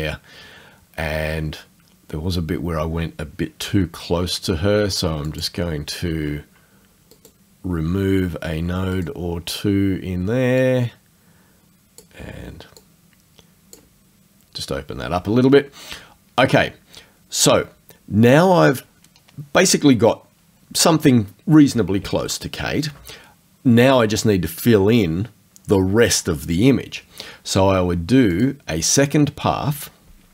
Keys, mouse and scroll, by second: 5.3 alt+click, 7.2 right click, 9.0 right click, 10.6 click, 12.8 click, 28.4 click.